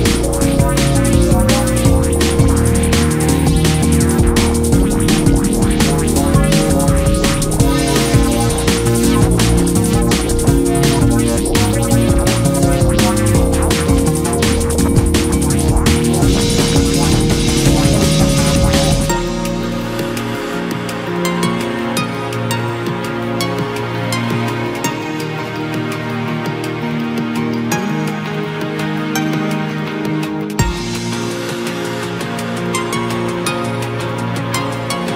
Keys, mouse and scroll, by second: 0.5 click, 1.3 h, 2.0 KP_1, 2.6-3.5 scroll up 4, 3.5 shift+middle click, 3.8-4.5 scroll up 1, 4.5 click, 6.3 click, 7.0 click, 7.5 g, 10.0 KP_Subtract, 11.3 click, 12.7 click, 13.2 g, 14.5 Tab, 14.7-15.8 scroll down 6, 15.8-16.2 scroll down 2, 16.2 drag, 16.4-17.1 scroll down 1, 17.1 shift+middle click, 17.3 scroll up 2, 17.5 scroll down 1, 17.6-18.5 middle drag, 18.5-18.8 scroll up 2, 18.8 KP_1, 19.6 click, 20.0-21.2 shift+middle drag, 21.2-22.0 drag, 22.0-22.5 scroll down 4, 22.1 Tab, 22.5-25.6 typing, 22.8 scroll up 2, 24.2-24.6 scroll up 1, 26.8 KP_Decimal, 27.2-27.9 scroll down 10, 27.9 s, 28.4 g, 29.4 s, 31.0 g, 32.3 scroll up 1, 32.5 scroll down 2, 32.7 middle click, 33.0-34.2 scroll up 3, 33.2 middle click, 33.6 middle click, 34.2 s.